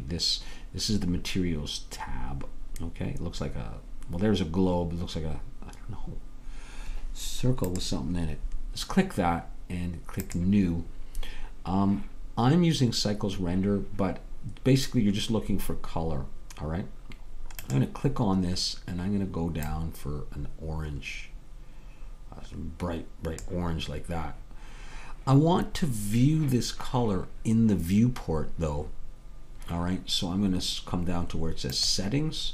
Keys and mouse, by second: 10.4-12.4 drag, 18.9-21.1 drag, 32.4-32.5 drag.